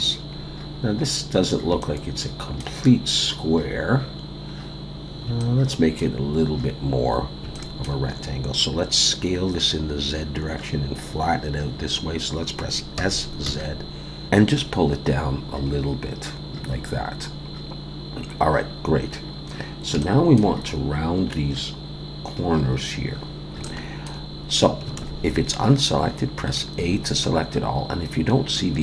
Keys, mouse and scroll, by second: 0.4-1.0 scroll down 1, 1.0-1.7 scroll up 2, 1.8 shift+middle click, 4.4-4.9 scroll down 1, 5.4 shift+middle click, 7.5 shift+middle click, 13.0 s, 19.1-19.9 scroll up 1, 20.0 shift+middle click, 23.6 shift+middle click, 25.0 alt+a, 26.8 a.